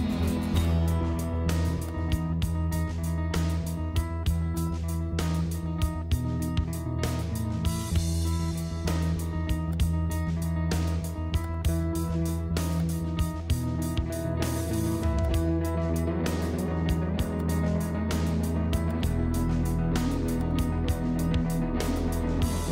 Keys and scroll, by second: 7.4 ctrl+0.